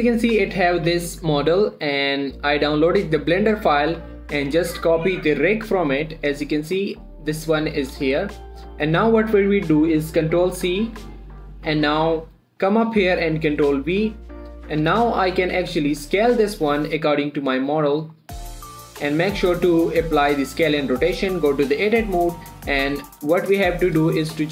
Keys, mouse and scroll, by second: 0.0 click, 0.9 typing, 5.0 click, 7.5-7.8 scroll up 1, 7.8 click, 8.5 z, 8.8 middle click, 9.8-10.5 scroll down 1, 10.9 ctrl+c, 12.0 click, 13.3 scroll down 1, 13.9 ctrl+v, 14.4 scroll up 1, 14.6-15.2 scroll down 1, 15.2 click, 15.4 scroll down 1, 15.4 middle click, 16.0 s, 17.6 click, 17.7 1, 18.0-18.8 scroll up 1, 18.8 s, 19.3 click, 19.5-19.8 ctrl+scroll up 1, 19.8 ctrl+a, 20.5 click, 21.1 Tab, 22.2 click, 23.5 r, 24.0 right click.